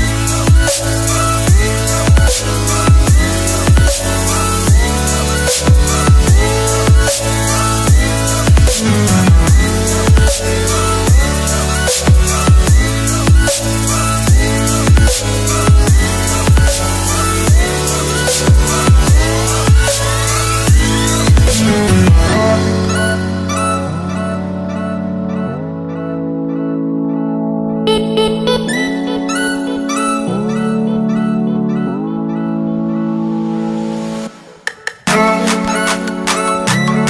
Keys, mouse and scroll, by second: 7.7 click, 12.4 click, 18.6 click, 22.0 Return, 24.0 right click, 26.1 click, 29.3 click.